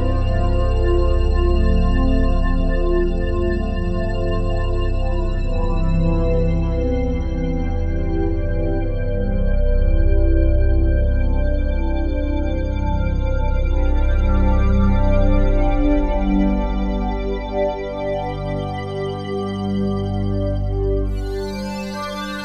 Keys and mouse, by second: 1.6 click, 3.1 click, 5.2 click, 8.5 click, 10.0 click, 11.1 click, 15.9 click, 16.8-17.3 drag, 17.6 space, 19.8 space.